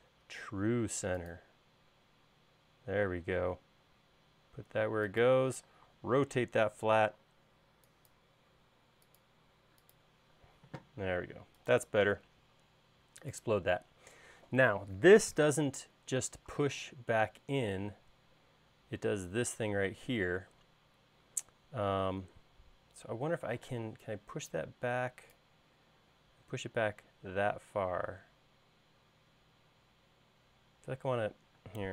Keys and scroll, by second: 5.9 q, 10.7 space, 11.3 space, 24.0 p.